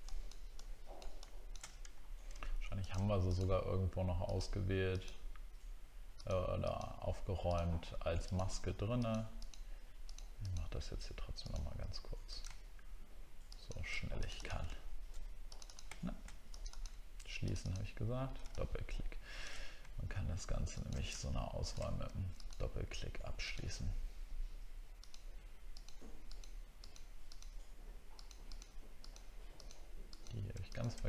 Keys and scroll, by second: 2.1 alt+scroll up 1.